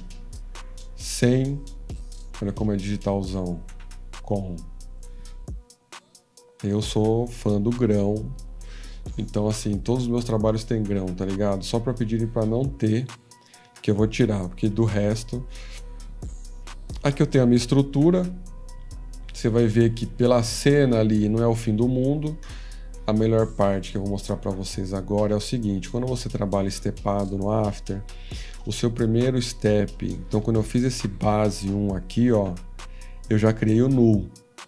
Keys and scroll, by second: 9.0 ctrl+-.